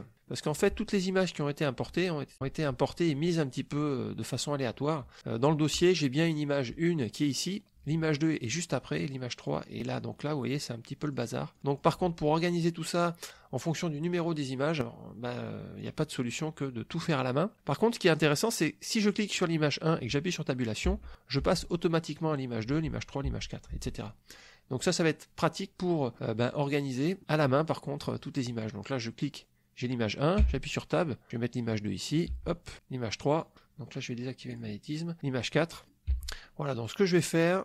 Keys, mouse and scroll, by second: 0.2 click, 5.7 click, 8.4 click, 9.4 click, 9.9 click, 11.0 click, 11.5 click, 11.8 click, 13.6 click, 15.1 click, 15.8 click, 19.1 click, 20.8 Tab, 21.4 Tab, 22.7 Tab, 24.3 click, 26.1 middle click, 26.5 click, 27.2 click, 28.2-28.8 drag, 30.4 Tab, 31.3-32.3 drag, 32.3 Tab, 32.7-33.5 drag, 34.5 click, 35.2 Tab, 35.7 click, 36.1 Tab, 37.1-37.6 drag.